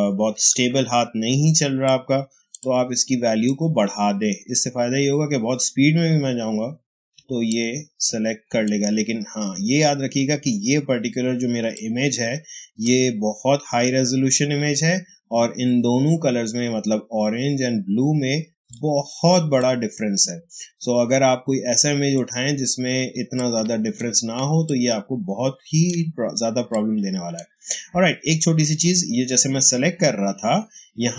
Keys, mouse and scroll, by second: 1.2 space, 1.7 click, 1.9 space, 2.5 click, 2.6 space, 7.0 space, 7.4 click, 7.5 space, 11.5 space, 11.6 click, 12.1 space, 18.5 space, 18.6 click, 19.1 space, 22.0 click, 23.0 space, 23.3 click, 23.5 space, 23.6 h, 24.5-29.9 ctrl+drag.